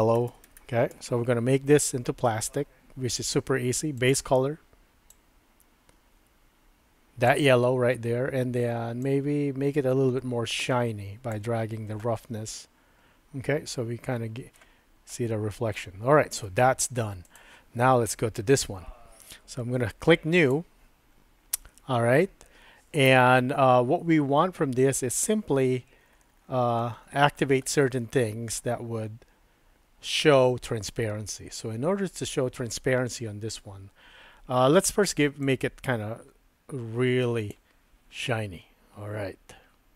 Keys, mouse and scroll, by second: 0.3 l, 4.0 click, 9.2-11.4 drag, 12.2-14.6 middle drag, 15.1 middle click, 17.3 click, 20.5 click, 35.6-37.5 drag, 38.3-39.9 middle drag.